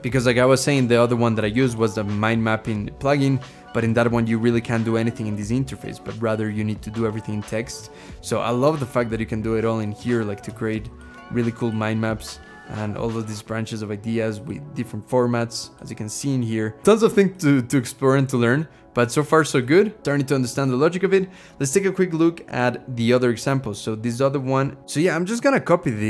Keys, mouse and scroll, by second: 0.0-0.8 scroll down 2.